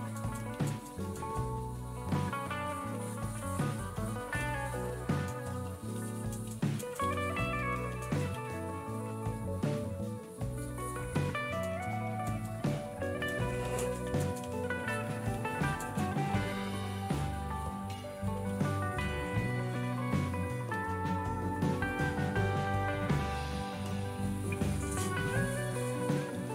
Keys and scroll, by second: 0.0-1.5 typing, 2.5-19.2 typing, 20.4-23.3 typing, 26.1-26.5 typing.